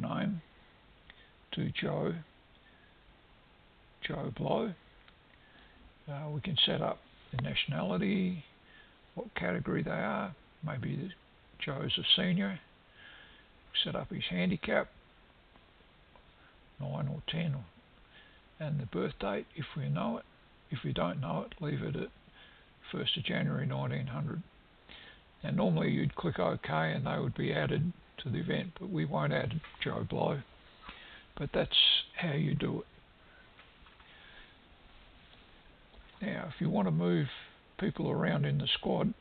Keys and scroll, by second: 2.8 e.